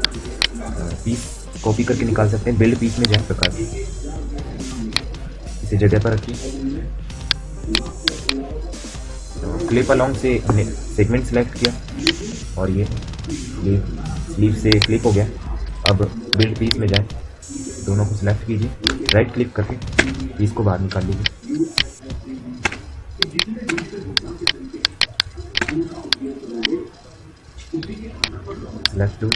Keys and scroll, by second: 19.7 space, 22.4 space, 23.4 space, 25.4 space.